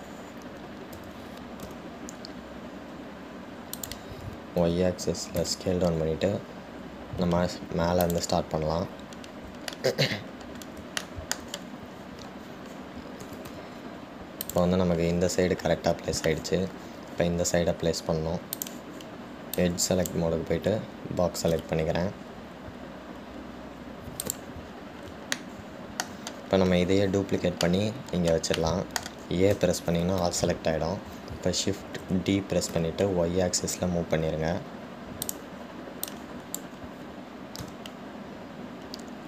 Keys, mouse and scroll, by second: 10.1-10.9 scroll up 1, 10.9-14.5 shift+middle drag, 14.5 g, 19.8 click, 20.8 click, 22.7 g, 25.9 scroll down 2, 26.6-30.8 shift+middle drag, 30.8 a, 33.1 shift+d, 37.4 click.